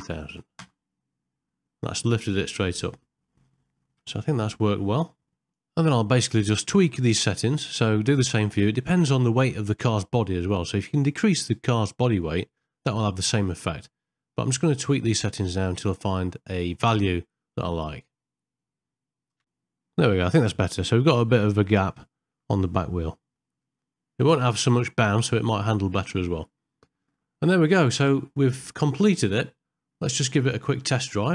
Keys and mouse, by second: 0.0 KP_0, 2.2-3.8 middle drag, 4.2 shift+middle click, 5.9 shift+Left, 7.0 middle click, 7.9 ctrl+middle click, 8.6 ctrl+middle click, 10.9-12.4 drag, 13.0 shift+Left, 14.2 middle click, 14.6 ctrl+middle click, 15.1 middle click, 16.6 click, 16.9 KP_0, 17.5-18.7 drag, 19.3 ctrl+middle click, 20.4 middle click, 21.8 ctrl+middle click, 23.2 ctrl+middle click, 23.8 shift+middle click, 26.3 middle click, 26.9 ctrl+middle click, 27.7-29.9 middle drag, 30.1 ctrl+middle click.